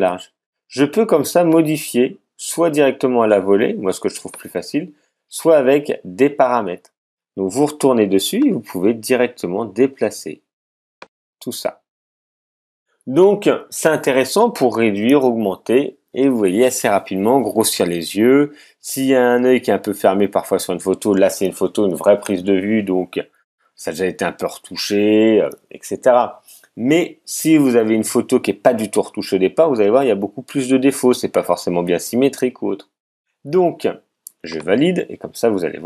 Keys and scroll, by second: 0.0 super+z.